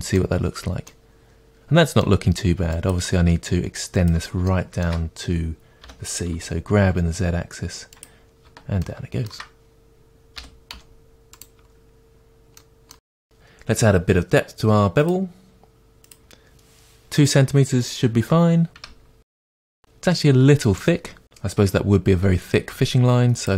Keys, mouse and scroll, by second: 0.5-0.9 scroll down 2, 2.9 click, 3.2 Tab, 4.1 click, 4.5-15.1 shift+middle drag, 5.9 g, 8.0 click, 10.2 g, 10.6 click, 10.8-11.2 scroll down 2, 15.1-18.8 drag, 18.8 Tab, 19.3-21.2 middle drag, 20.0-20.4 scroll up 2, 21.2 click, 23.4-23.5 drag.